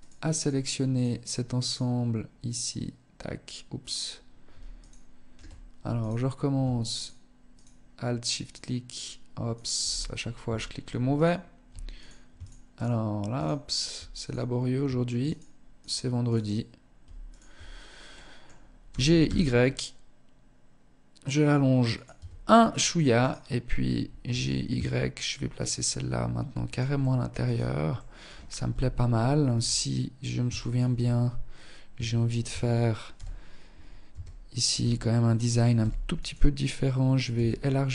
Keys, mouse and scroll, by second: 0.1 alt+shift+right click, 0.8 alt+shift+right click, 1.7 alt+shift+right click, 4.0 ctrl+alt+shift+right click, 5.2 alt+right click, 6.2 alt+shift+right click, 6.7 alt+shift+right click, 6.8 ctrl+alt+shift+right click, 7.6 alt+shift+right click, 8.7 alt+shift+right click, 9.1-9.5 scroll up 3, 9.7 shift+middle click, 10.3 right click, 11.2 alt+right click, 11.6 alt+shift+right click, 12.0 alt+right click, 12.5 alt+shift+right click, 13.4 alt+right click, 14.4 alt+shift+right click, 15.0 alt+shift+right click, 15.5 alt+shift+right click, 16.5 shift+right click, 16.9 scroll up 1, 17.3 middle click, 18.0 g, 21.4 Tab, 21.6-22.0 scroll down 6, 22.4 right click, 23.4 g, 26.2 middle click, 26.6-27.0 scroll down 4, 27.2 middle click, 27.9 KP_1, 28.7 Tab, 29.8 shift+middle click, 30.2 scroll up 3, 31.3 shift+middle click, 31.6 a, 32.3 z, 33.3 a, 33.9 a, 35.0 b, 36.5 s.